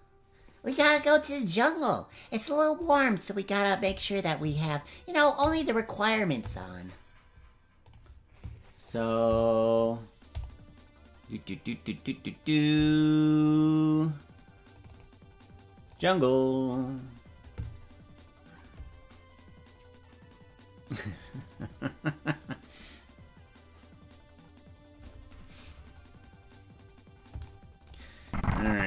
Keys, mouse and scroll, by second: 28.2 click.